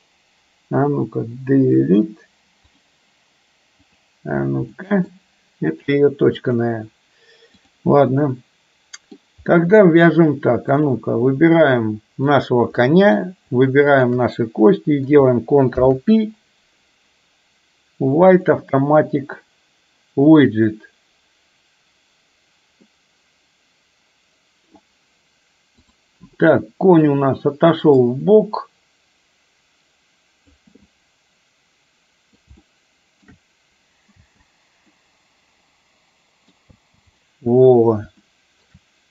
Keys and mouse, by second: 1.8 Delete, 3.9 click, 4.9 middle click, 6.5-7.8 drag, 8.0-9.3 middle drag, 9.7-10.2 middle drag, 10.9 click, 12.4 click, 12.9-13.3 middle drag, 13.9 shift+click, 15.8 ctrl+p, 23.0-24.9 middle drag, 28.2-30.7 drag, 30.9-32.4 middle drag, 32.7-33.4 shift+middle drag, 34.3 space, 34.9-36.7 middle drag, 36.8 space, 38.3-38.8 shift+middle drag.